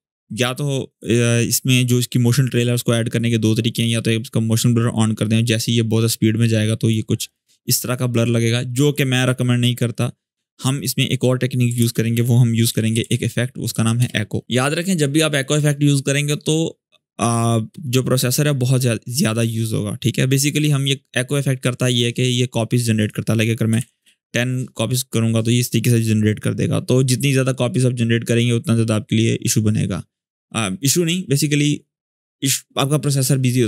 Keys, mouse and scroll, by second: 3.4-6.5 drag, 9.6 click, 9.7 click, 11.5 ctrl+space, 12.2-13.3 typing, 13.5 Down, 13.7 Return, 20.3 click, 22.7 click, 23.2-24.0 typing.